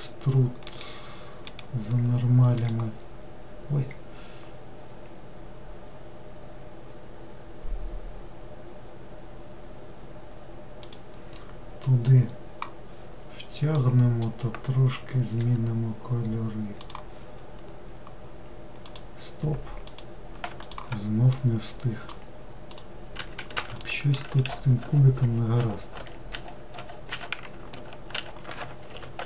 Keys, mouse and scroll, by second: 1.6-4.6 right drag, 13.9-15.5 middle drag, 15.5 g, 19.0 click, 20.0 click, 20.7 shift+click, 21.4-22.8 middle drag, 22.8 click, 23.2 Escape, 23.5 Escape, 23.6 Escape, 23.9-24.4 middle drag, 24.4 ctrl+z, 24.9 ctrl+z, 25.3 ctrl+z, 25.7 ctrl+z, 26.0 ctrl+z, 26.8 ctrl+z, 27.2 ctrl+z, 27.8 ctrl+z, 28.2 ctrl+z.